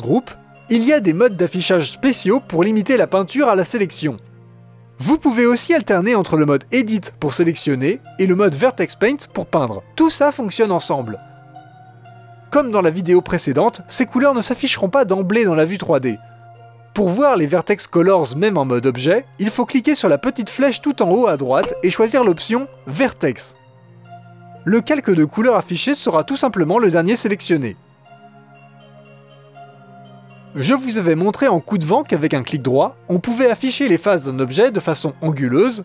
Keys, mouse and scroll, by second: 5.7-6.9 middle drag, 6.9-8.0 drag, 9.5 click, 10.0 middle click, 10.6-12.3 drag, 12.3 middle click, 12.8 click, 13.3 middle click, 13.9 click, 14.4-20.5 middle drag, 20.5-24.1 drag, 24.1 middle click, 24.8-28.9 drag, 30.5-31.7 drag, 31.7 middle click, 32.4-32.9 scroll down 2, 32.9-35.8 drag.